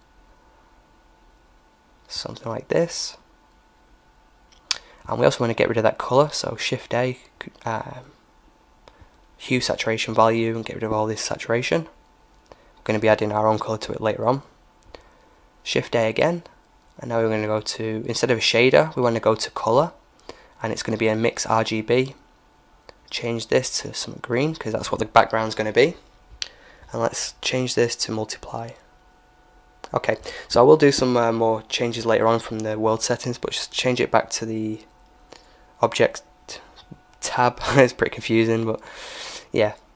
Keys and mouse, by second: 0.0-1.8 drag, 3.1-5.0 drag, 4.8 shift+a, 8.6-11.3 drag, 11.9-14.9 drag, 14.8 shift+a, 21.9-24.7 drag, 26.8-28.7 drag, 29.2 Escape, 29.2-30.5 drag, 35.4-37.2 drag, 37.8-39.6 drag.